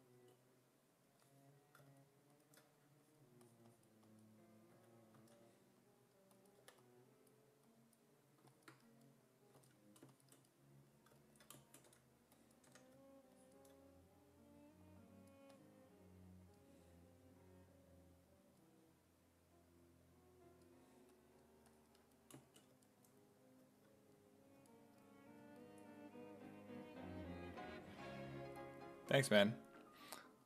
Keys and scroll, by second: 2.8 2, 4.7 s, 5.2 s, 6.6 4, 9.6 s, 11.9 w, 12.7 w.